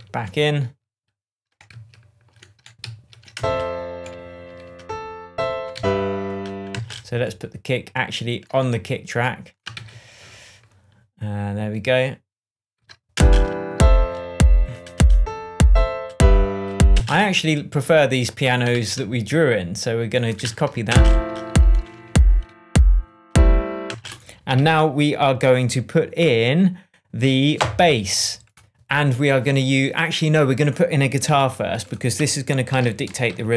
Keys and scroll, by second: 1.7 shift+super+z, 3.3 shift+super+space, 5.7 shift+super+z, 6.7 shift+super+space, 7.3 shift+space, 9.7 super+d, 13.1 super+space, 13.9 space, 16.9 space, 18.7 super+c, 20.4 super+v, 20.8 super+space, 21.6 space, 23.8 space, 24.4 super+space, 24.5 super+s, 31.2 super+t, 32.7 super+r, 33.2 shift+super+g, 33.4-33.5 typing.